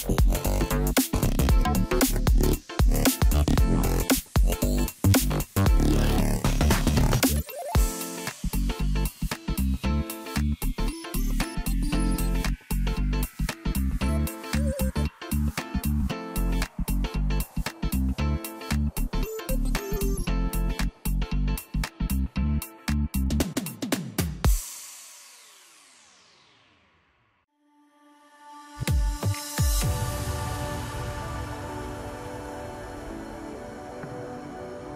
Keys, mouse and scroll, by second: 0.0-1.0 scroll up 2, 1.0 Tab, 1.8-2.3 scroll up 2, 2.3-3.8 scroll down 2, 3.8 ctrl+r, 6.1-8.1 scroll up 1, 8.1 3, 9.4 click, 9.6 click, 11.0 click, 11.9 c, 18.8 click, 19.0 scroll down 3, 19.3 middle click, 19.8 scroll up 1, 20.8 shift+d, 22.2 p, 22.9 Tab, 23.6 click, 25.8 Tab, 26.7 a, 27.1-27.8 scroll up 1, 27.8 e, 29.2 alt+s, 30.6-32.9 middle drag, 32.9-34.4 drag, 34.4 scroll down 1, 34.7-34.9 middle drag.